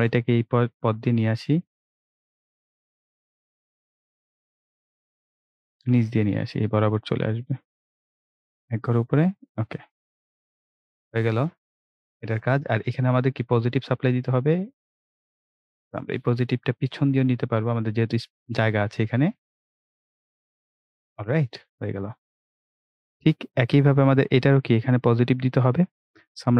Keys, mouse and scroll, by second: 8.1 click, 13.2-13.6 scroll up 1, 15.5 click, 21.7 scroll down 1, 26.0 click.